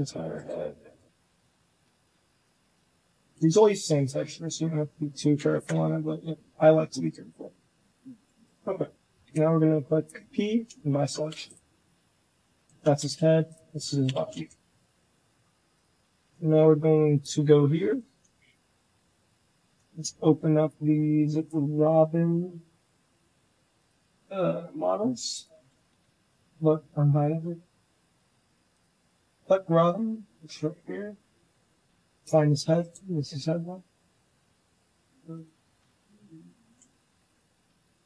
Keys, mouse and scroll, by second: 0.7 shift+click, 1.0 click, 1.6 shift+click, 2.0 g, 2.5 shift+click, 3.8 l, 5.4 KP_1, 6.1 g, 7.4 shift+middle click, 7.6 g, 9.1 p, 10.6 shift+click, 10.9 Tab, 11.3 click, 11.5 g, 12.6 Tab, 12.9 a, 13.0 Tab, 13.4 click, 13.6 Tab, 13.9 a, 14.0 Tab, 15.6 click, 16.0 shift+middle drag, 17.0 click, 20.5 click, 23.7 click, 25.2 click, 25.9 alt+h, 27.1 click, 32.5 g, 33.4 click, 35.2 shift+click, 36.5 ctrl+z, 37.1 ctrl+click, 37.9 g.